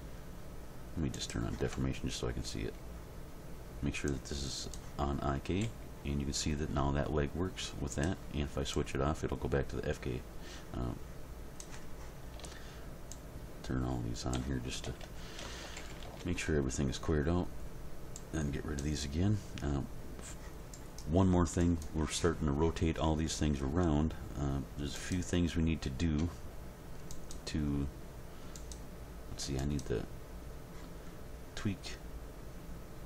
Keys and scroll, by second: 5.6 g, 14.8 a, 15.6 alt+r, 15.8 alt+g, 16.0 alt+s.